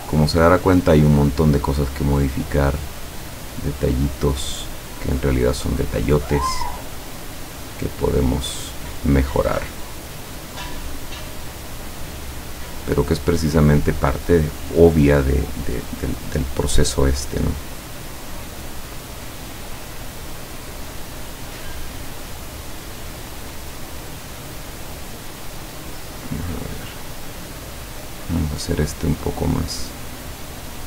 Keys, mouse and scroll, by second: 0.5 click, 2.0 click, 3.0-8.3 drag, 8.7-10.9 drag, 11.4 click, 12.2-13.7 drag, 18.7 click, 19.5 click, 20.7 click, 21.8-24.2 drag, 25.8 click, 27.5-29.8 drag, 30.3-30.8 drag.